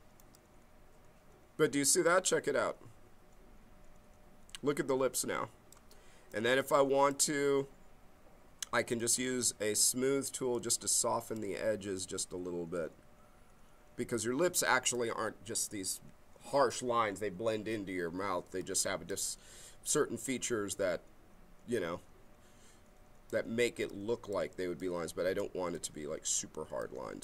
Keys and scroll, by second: 10.4 b.